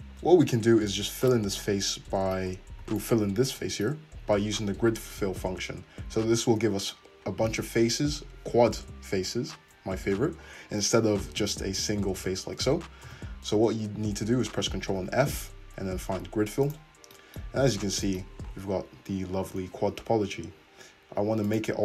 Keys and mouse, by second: 0.6 2, 1.2 alt+click, 1.3 alt+middle click, 3.0 alt+click, 12.2 f, 13.1 ctrl+z, 13.1 f, 15.0 ctrl+f, 17.5 `, 19.0-21.4 middle drag, 21.6-21.8 drag.